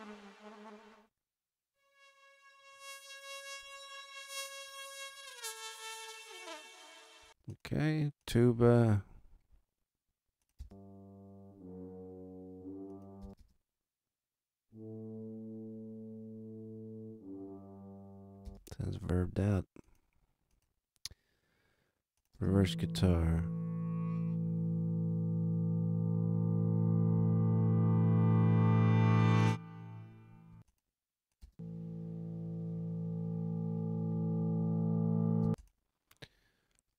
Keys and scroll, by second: 7.2 space, 10.5 space, 13.2 space, 18.4 space, 22.3 space, 30.5 space, 35.4 space.